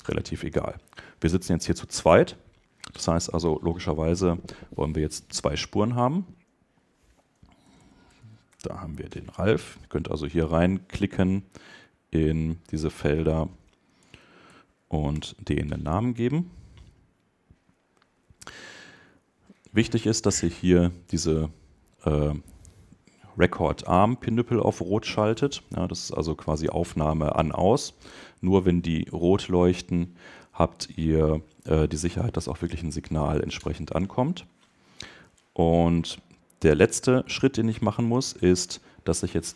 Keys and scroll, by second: 8.4 shift+Return, 15.1 Return.